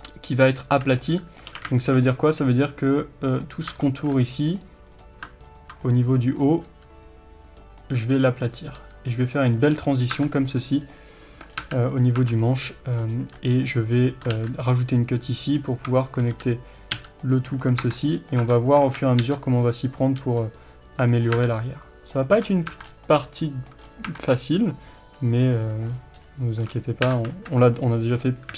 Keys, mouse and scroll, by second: 0.0 shift+click, 1.1-5.0 middle drag, 1.6 alt+a, 3.7 scroll up 1, 5.0 click, 5.9-8.6 middle drag, 6.7 g, 8.6 click, 8.8 g, 9.4 click, 9.6-15.4 middle drag, 10.2 Tab, 10.4 scroll down 1, 11.4 Tab, 11.6 scroll down 1, 11.7 Tab, 12.1 scroll up 1, 12.2 Tab, 13.1-13.5 scroll up 1, 14.4 ctrl+r, 15.6 click, 16.4 f, 17.3-19.0 middle drag, 17.9 Tab, 18.0 scroll down 1, 18.5 Tab, 18.5 scroll up 1, 18.8 alt+a, 19.0 click, 19.3 g, 19.9 click, 20.3 g, 21.3 scroll down 1, 21.4 Tab, 21.5-28.5 middle drag, 22.4 Tab, 22.5-23.1 scroll down 2, 22.7 Tab, 23.9 scroll up 1, 24.1 Tab, 25.9-26.2 scroll up 1, 26.5 scroll down 4, 26.6 Tab, 26.7 Tab, 27.6 scroll up 2, 28.3-28.5 scroll up 2.